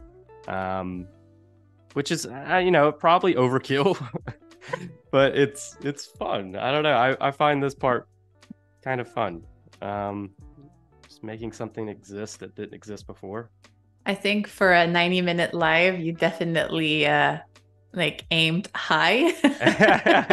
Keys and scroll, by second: 10.5 super+-, 11.4 space, 15.1 z, 16.7 a.